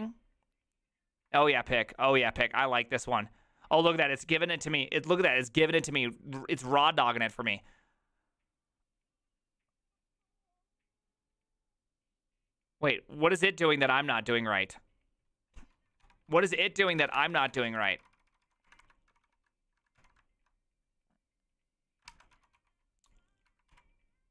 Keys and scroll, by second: 1.5 alt+{, 16.0 Tab, 16.8-20.0 typing, 22.1 ctrl+c, 22.1-23.7 typing.